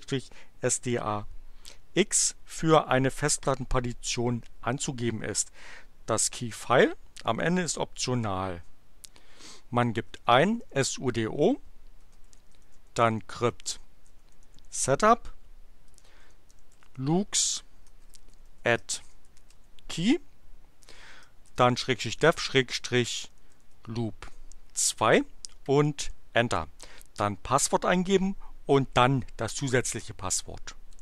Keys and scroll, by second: 9.8-19.9 typing, 21.1-24.2 typing, 26.0 Return, 30.6-31.0 typing.